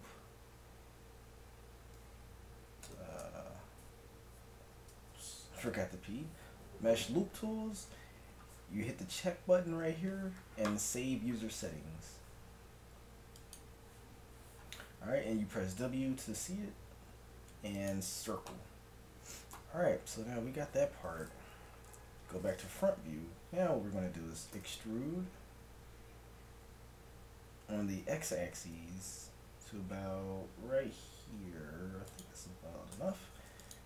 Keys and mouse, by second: 15.2 w, 18.6-21.9 middle drag, 21.9 KP_1, 24.6 e, 32.9 ctrl+Tab.